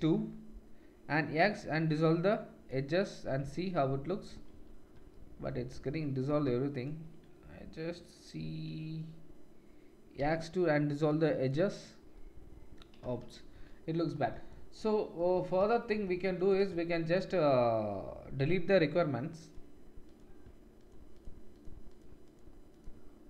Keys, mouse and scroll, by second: 3.2-5.2 drag, 4.5 ctrl+z, 5.5 click, 6.2-13.0 shift+drag, 6.7 shift+middle click, 6.7 shift+right click, 10.1 x, 12.4 middle click, 13.1 ctrl+z, 13.5 ctrl+z, 16.3 click, 19.4 click, 20.7 shift+click, 21.5 shift+click, 22.7 shift+click.